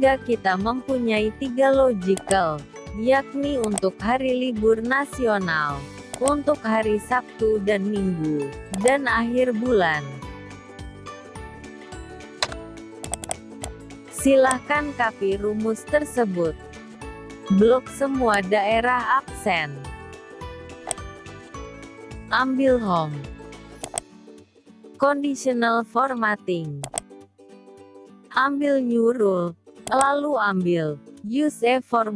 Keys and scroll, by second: 14.6 ctrl+c.